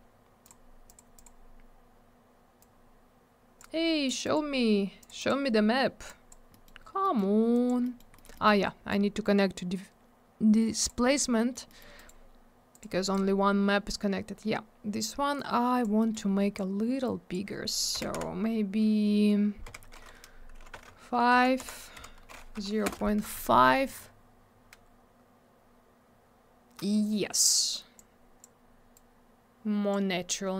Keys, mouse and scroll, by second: 0.4 click, 0.4 click, 0.8 click, 0.9 double click, 1.1 click, 1.2 click, 2.6 click, 4.0 click, 4.1 click, 4.2 right click, 4.3 double right click, 5.0 click, 5.0 click, 5.1 click, 5.2 double click, 6.0 click, 6.5 middle click, 6.6 middle click, 6.8 scroll down 1, 7.0 middle click, 7.1 middle click, 7.5 click, 7.6 click, 7.8 middle click, 7.9 double middle click, 8.1 middle click, 8.2 middle click, 8.3 middle click, 8.4 double middle click, 8.9 click, 11.3 middle click, 11.5 middle click, 11.6 middle click, 11.7 double middle click, 11.9 right click, 12.0 right click, 12.7 click, 12.8 click, 13.0 click, 13.1 click, 15.3 click, 15.9 middle click, 16.1 middle click, 17.0 click, 17.9 0, 20.7 Tab, 21.3 0, 22.5 BackSpace, 22.8 Return, 25.1-25.7 scroll up 1, 26.9-27.8 scroll down 1, 27.9 click, 28.9 click.